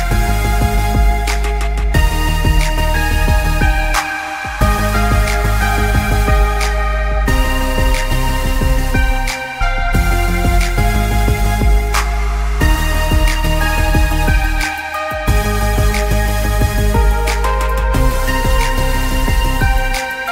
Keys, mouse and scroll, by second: 0.5 shift+click, 1.5-2.1 scroll down 1, 2.3 click, 4.4 scroll down 1, 6.4 click, 8.1 shift+click, 11.7 g, 12.6 click, 16.6 shift+click.